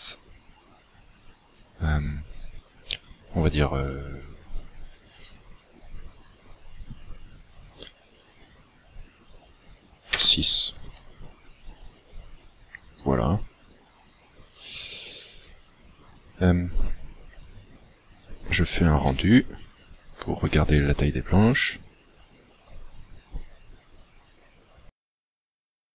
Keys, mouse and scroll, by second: 11.8-12.3 scroll down 9.